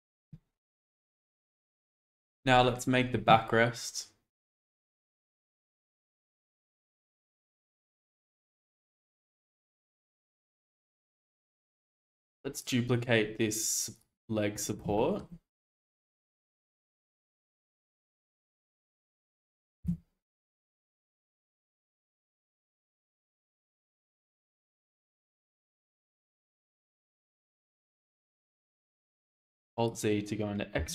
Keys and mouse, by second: 5.0 shift+middle click, 8.2 shift+d, 9.8 Escape, 10.7 ctrl+z, 11.4 middle click, 12.1 shift+middle drag, 15.0 shift+middle drag, 16.2 shift+d, 16.6 y, 18.1-19.2 drag, 19.8 g, 23.5 shift+middle click, 24.9 g, 25.0 x, 26.2-27.2 drag, 27.2 Tab, 27.9 alt+z, 28.4-29.9 drag, 30.8 g.